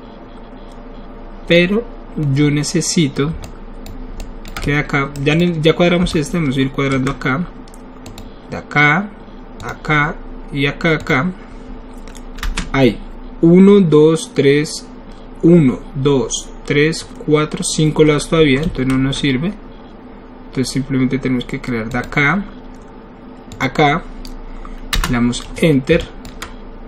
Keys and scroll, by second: 12.5 Return, 25.0 Return.